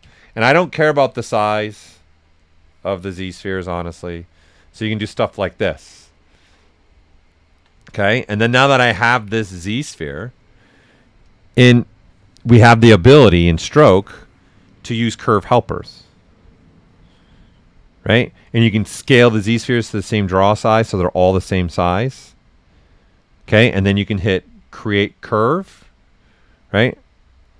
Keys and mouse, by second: 0.0 q, 0.5 click, 1.4 click, 2.3 click, 3.0 ctrl+right click, 3.5 right click, 8.3 right click, 9.1 ctrl+right click, 9.4 right click, 11.2 click, 14.6 click, 19.6 click, 25.3 click.